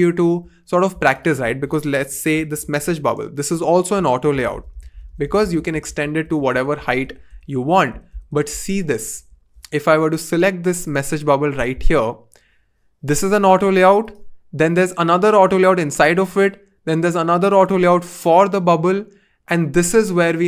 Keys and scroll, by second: 2.3-5.5 typing, 5.8 super+z, 6.2 super+z, 6.5 super+z.